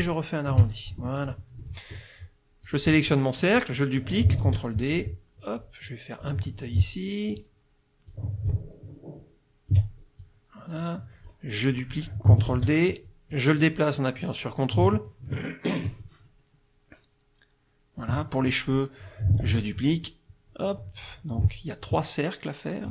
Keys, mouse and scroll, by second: 1.0 ctrl+shift+F1, 1.2 ctrl+shift+click, 1.6 ctrl+shift+middle click, 2.7 click, 3.2 middle click, 4.4 ctrl+d, 5.0-6.4 ctrl+drag, 7.4 ctrl+shift+click, 8.5-9.9 ctrl+shift+drag, 10.2-11.5 ctrl+shift+drag, 12.5 ctrl+d, 13.3-18.2 drag, 19.4 ctrl+d, 20.1-21.3 drag, 21.8-22.9 ctrl+shift+drag.